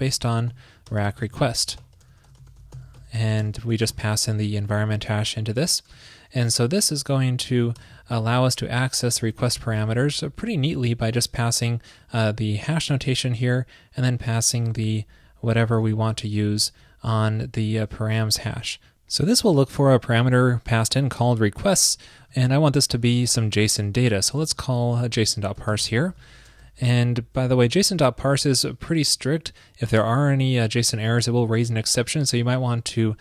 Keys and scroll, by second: 4.7 super+Left, 6.0 alt+shift+Right, 9.7 super+Right, 16.6 alt+shift+Left, 22.5 alt+Left, 26.3 shift+super+Right, 27.5 shift+super+Right, 27.8 shift+super+Left.